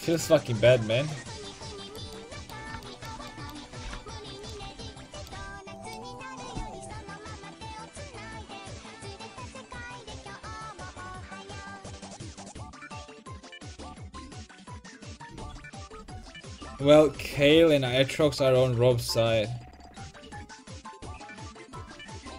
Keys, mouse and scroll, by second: 1.9 right click, 2.2 click, 2.4 right click, 3.4 right click, 3.8 g, 4.7 a.